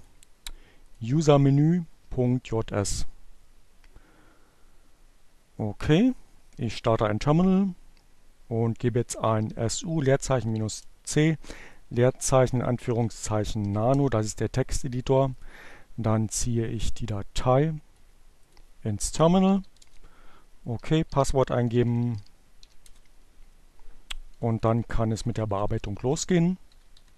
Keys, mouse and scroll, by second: 1.1 click, 8.1-12.8 typing, 13.8 click, 15.1-16.4 drag, 16.5 click, 17.1 shift+2, 17.2 shift+Return, 18.4-19.2 typing, 21.2 Page_Down.